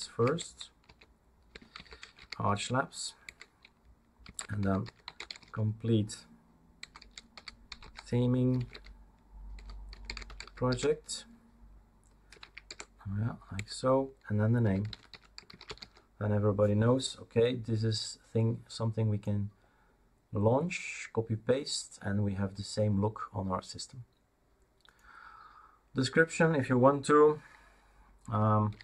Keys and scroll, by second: 0.0-11.2 typing, 12.3-16.3 typing, 28.5-28.8 typing.